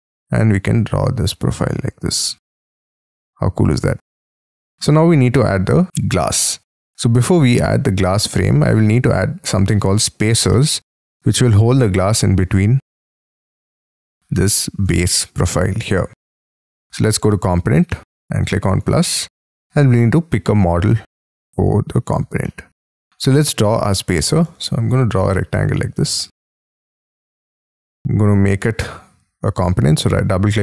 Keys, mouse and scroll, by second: 2.3 space, 2.4-2.9 scroll up 11, 2.9 middle click, 4.1-4.5 scroll down 10, 4.6-5.9 scroll up 22, 7.3-8.5 scroll down 14, 8.5-9.8 scroll up 5, 9.8-10.2 scroll down 7, 10.2 scroll up 7, 10.4 middle click, 10.9 scroll down 1, 11.3-12.3 scroll up 4, 12.3-14.4 scroll down 10, 18.0 middle click, 21.5-22.2 scroll down 10, 22.2 scroll up 4, 22.4 middle click, 23.1-24.5 scroll up 23, 24.5 r, 26.7 space, 27.1 double click, 29.4 right click.